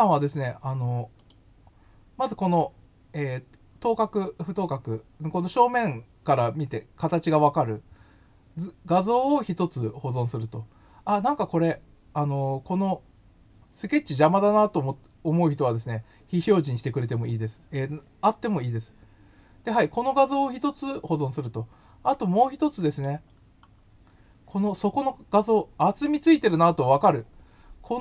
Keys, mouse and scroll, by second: 1.1 click, 14.1-16.3 drag, 21.4-23.0 middle drag, 23.3-23.8 scroll down 2, 24.3 scroll down 1, 25.4-25.8 scroll down 3.